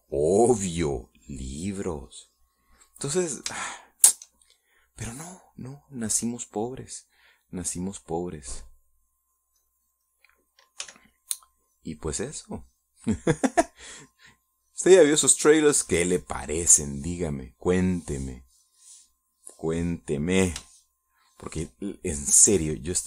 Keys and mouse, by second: 1.4-4.6 drag, 5.1 shift+middle click, 6.1 middle click, 6.6-8.3 middle drag, 10.1 middle click, 10.9 click, 12.2 f, 12.4-18.3 drag, 19.2-21.7 drag, 22.1-23.0 shift+middle drag.